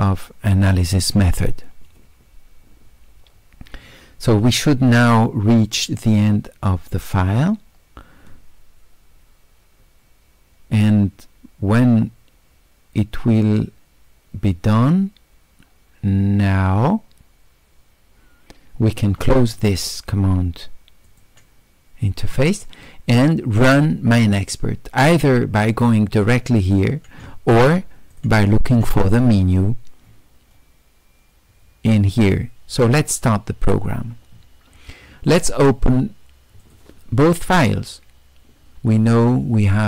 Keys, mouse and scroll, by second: 21.1 click, 25.1 click, 28.1 click, 29.2-31.7 middle drag, 32.2 click, 32.8 click, 35.3 click, 36.6 click.